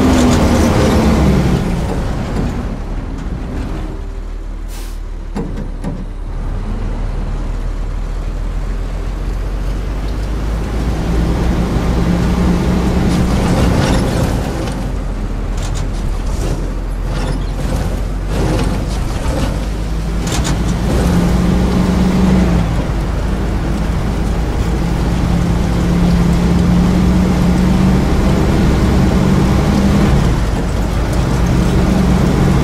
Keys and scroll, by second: 1.1 w, 1.8 q, 2.1 s, 5.3 q, 6.2 w, 9.9 a, 12.3 d, 12.7 a, 14.7 w, 22.2 e, 30.0 e, 30.7 a.